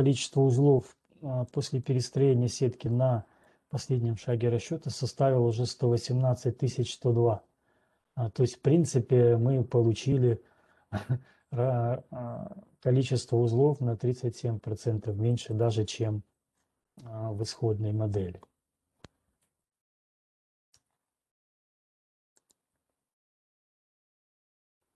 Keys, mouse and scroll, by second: 3.6 click, 5.1 click, 16.4 right click, 17.2-17.7 scroll, 21.3 alt+Tab, 22.9 alt+click, 23.2 scroll.